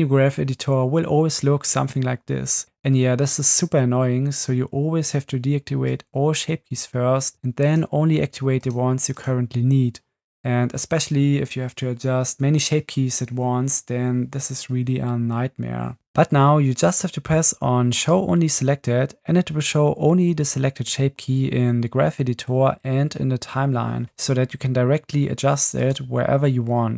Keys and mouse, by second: 5.9 click, 8.6 click, 9.1 click, 16.0 Right, 16.0 Left, 18.0 click, 25.8 click.